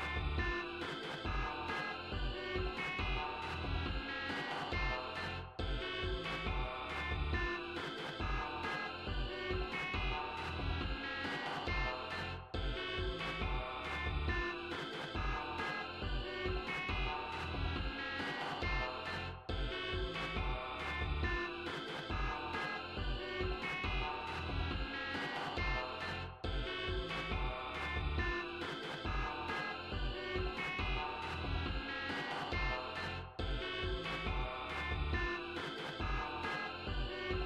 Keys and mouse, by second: 1.0 click, 2.0 click, 2.5 click, 3.9 click, 4.6 click, 6.3 click, 7.0 click, 9.7 click, 15.6 click.